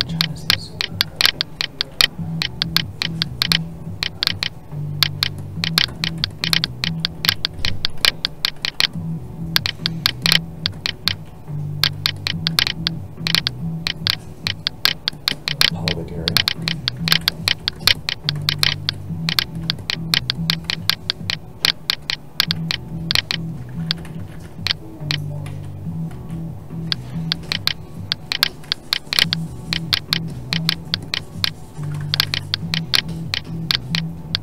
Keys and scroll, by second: 11.1 alt+a, 23.7 ctrl+z, 26.9 alt+a, 32.0 ctrl+z.